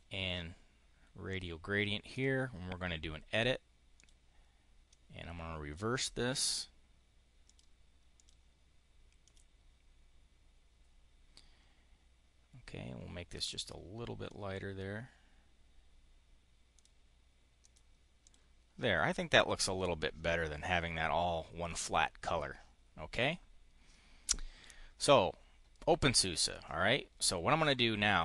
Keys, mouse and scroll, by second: 2.0 click, 3.2 click, 3.9 click, 4.8 click, 7.3 click, 8.1 click, 9.1 click, 13.3 click, 16.6 click, 17.5 click, 18.1 click, 27.5 click.